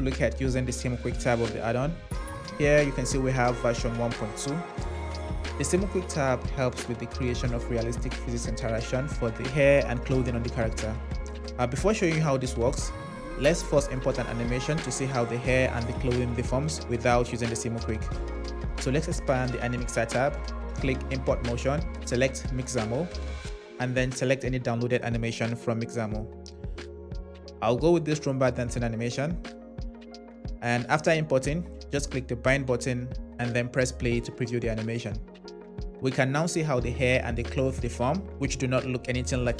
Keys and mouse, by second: 9.9 click, 19.6 click, 21.4-23.0 drag, 30.8 drag, 33.5 space, 34.8 drag, 38.5 middle click.